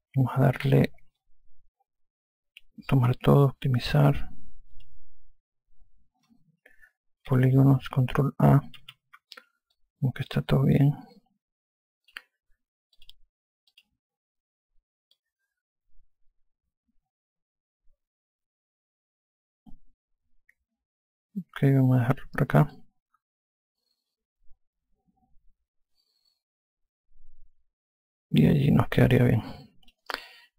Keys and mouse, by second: 3.0 click, 5.1 click, 7.7 3, 10.1 alt+click, 13.2 click, 15.5 click, 23.1 alt+click.